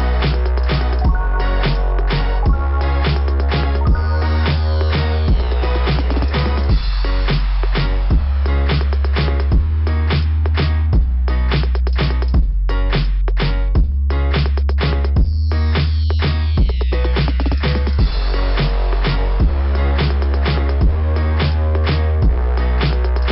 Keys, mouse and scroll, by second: 1.1 click, 5.2 click, 5.4 click, 5.9-7.3 typing, 6.0 click, 8.5 click, 8.6 click, 9.1 click, 9.2 click, 14.6 typing, 15.8 typing, 15.8 scroll down 2, 18.1 click, 21.5 click, 21.8 click, 22.3-22.7 scroll down 3, 23.1 click.